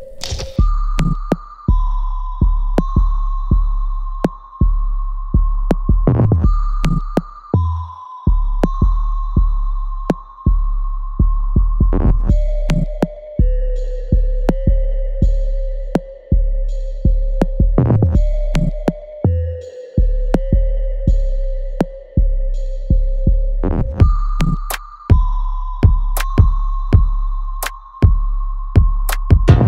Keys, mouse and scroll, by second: 0.7-2.1 alt+middle drag, 2.1 ctrl+z, 2.6 alt+click, 3.7 alt+middle click, 4.7 click, 4.7-6.1 alt+drag, 6.1 alt+middle click, 6.7 alt+click, 7.3 alt+right click, 8.8 shift+click, 11.0 ctrl+b, 12.5 ctrl+z, 12.8 shift+click, 13.6 ctrl+b, 16.5 click, 17.9 alt+right click, 18.5-21.0 alt+drag, 21.0 ctrl+b, 22.5-23.8 drag, 23.8-27.1 ctrl+drag, 27.1 alt+click, 27.5 alt+middle click, 28.0-29.6 alt+drag.